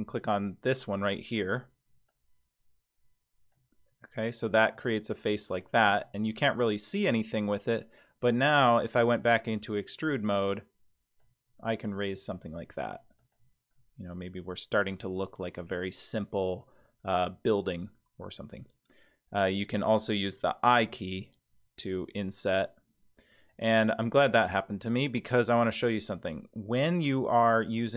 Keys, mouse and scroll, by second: 0.7 click, 2.1-3.8 drag, 4.7 Tab, 5.5 click, 5.9 Tab, 8.6 click, 10.0-11.5 drag, 11.6-12.9 middle drag, 13.2 click, 13.7-14.9 middle drag, 19.5 click, 20.8 i.